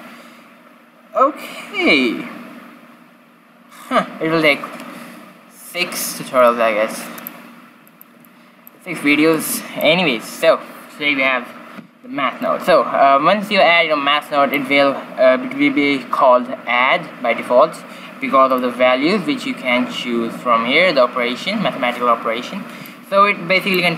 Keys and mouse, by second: 7.8-9.3 middle drag, 9.3-11.1 drag, 12.4-14.2 drag, 14.2 middle click, 18.4-20.3 drag.